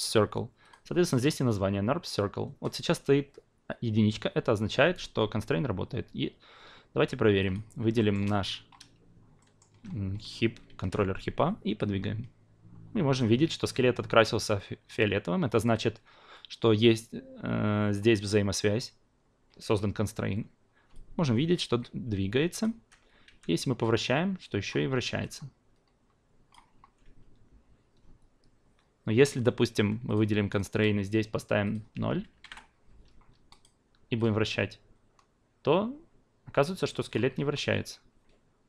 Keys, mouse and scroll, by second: 7.4 drag, 8.0 alt+middle click, 9.4 alt+middle click, 10.8 w, 11.8-13.3 drag, 20.9-22.6 drag, 22.7 ctrl+z, 23.2 e, 23.8-24.7 drag, 24.9 ctrl+z, 25.2-26.5 drag, 26.7 ctrl+z, 30.0 click, 30.5 click, 31.6 click, 33.5-37.1 drag, 37.3 ctrl+z.